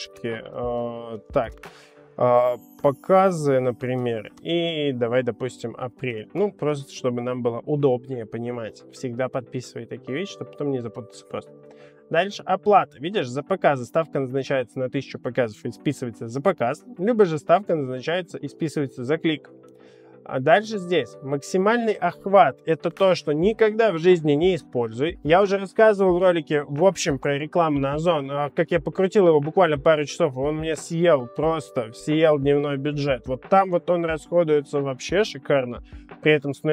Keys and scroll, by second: 0.0-1.5 typing, 2.7-4.3 typing, 5.9-6.8 typing.